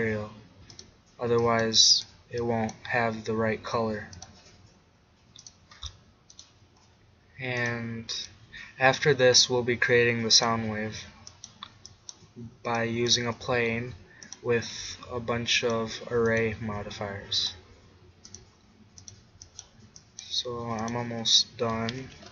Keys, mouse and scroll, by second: 4.2-10.1 drag, 10.4-12.3 drag, 14.3-17.3 drag, 17.3-18.4 middle drag, 18.4-20.9 drag.